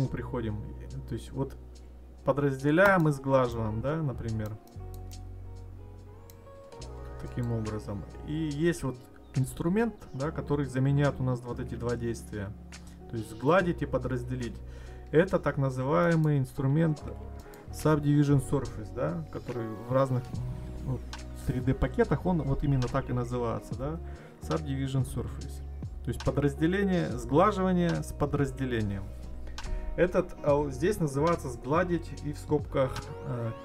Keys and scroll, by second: 14.6 ctrl+z.